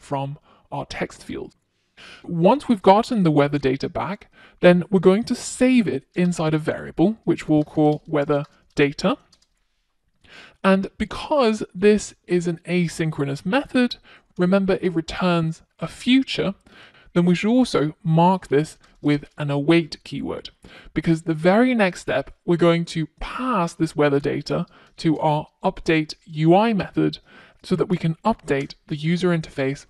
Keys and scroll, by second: 13.1 F1, 25.0 Return.